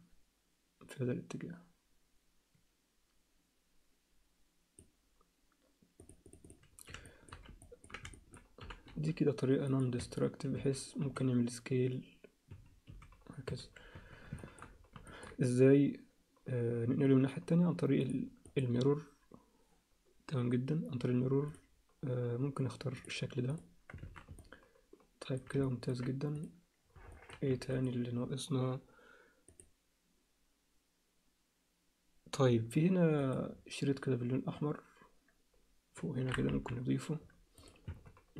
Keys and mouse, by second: 6.0 click, 6.4 click, 7.0 alt+shift+middle click, 7.6 ctrl+alt+middle click, 8.1 alt+shift+middle click, 8.3 click, 8.6 g, 10.0 Tab, 10.6 a, 11.0 s, 12.9 s, 13.9 Tab, 14.4 alt+shift+click, 15.1 ctrl+click, 18.6-21.5 drag, 23.0 click, 24.0 alt+a, 24.4 alt+middle click, 25.6 ctrl+alt+middle click, 27.1 alt+middle click, 27.6 alt+a, 27.8 click, 33.2 click, 36.5 KP_1, 37.6 click, 37.9 Tab.